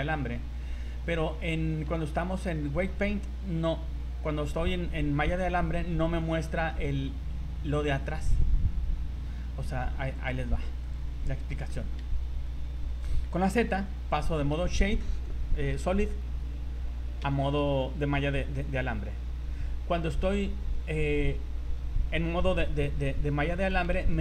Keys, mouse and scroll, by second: 0.7 z, 1.2 z, 2.1 shift+middle click, 5.7 scroll up 3, 6.4 shift+middle click, 7.3 scroll down 3, 10.1 click, 11.2 scroll down 3, 11.7 shift+middle click, 14.1 z, 19.4 Tab, 20.1 Tab, 20.7 Tab, 23.5 scroll up 3, 24.1 shift+middle click.